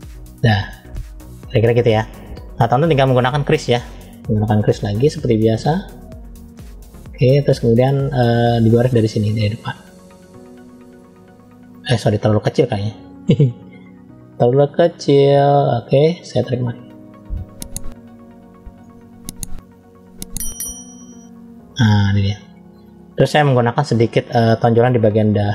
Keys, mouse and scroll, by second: 0.2 click, 0.6 click, 1.2 middle click, 2.9 click, 4.6 f, 8.8 middle click, 10.0 click, 12.3-13.4 drag, 14.5 f, 16.5 click, 22.0-22.4 scroll down 1, 23.5 click, 25.0 f.